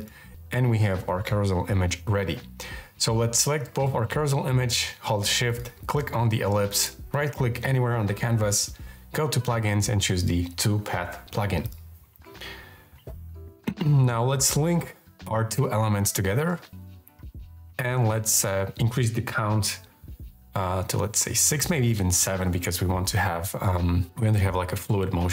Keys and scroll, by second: 19.6 Up, 21.4 Up.